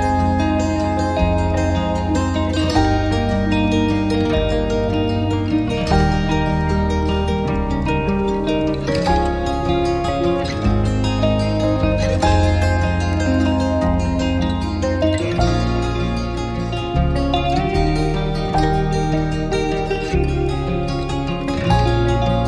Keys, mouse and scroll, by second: 1.2 scroll down 1, 1.4 alt+click, 2.2 right click, 3.8-4.2 scroll down 1, 5.2 scroll up 1, 5.4-5.7 scroll down 1, 6.4 alt+middle click, 6.6 alt+click, 7.0 alt+click, 7.1 alt+click, 7.3 scroll down 1, 7.4 alt+middle click, 7.5 right click, 7.8 alt+click, 8.4 alt+scroll down 2, 8.6 alt+click, 8.7 alt+scroll up 1, 8.9 alt+middle click, 10.2 alt+click, 11.6 scroll up 1, 14.2 alt+click, 14.7-15.2 scroll down 1, 15.6 alt+click, 18.2 scroll up 1, 19.0 alt+middle click, 19.2 alt+right click, 19.5-20.5 scroll down 1.